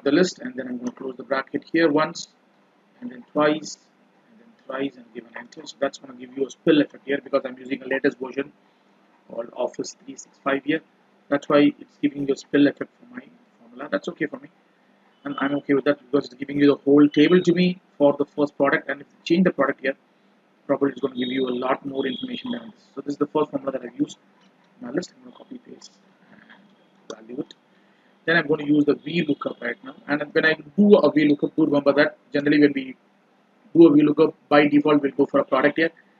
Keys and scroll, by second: 5.2 ctrl+Return, 24.7 ctrl+c, 25.8 alt+s, 26.5 alt+v, 30.0 F2.